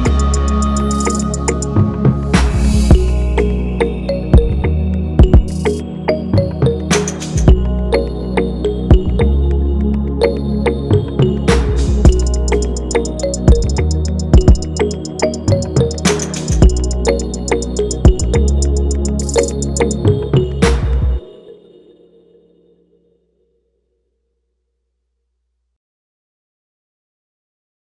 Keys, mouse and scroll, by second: 2.1 shift+click, 5.5 ctrl+[, 7.4 shift+click, 10.2 alt+click, 11.2 ctrl+z, 11.7 ctrl+[, 13.2 alt+click.